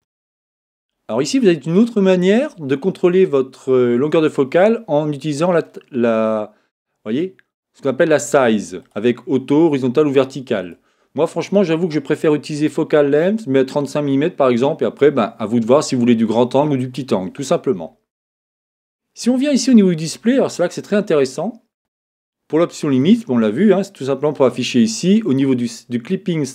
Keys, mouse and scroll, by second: 5.3-7.2 drag, 8.8-10.6 drag, 22.9-26.5 drag.